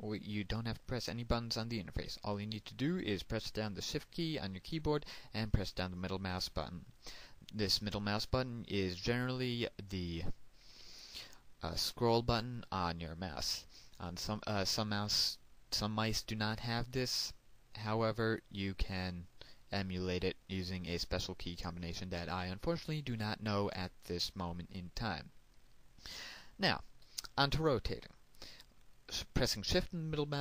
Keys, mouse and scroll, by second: 7.5 shift+middle click.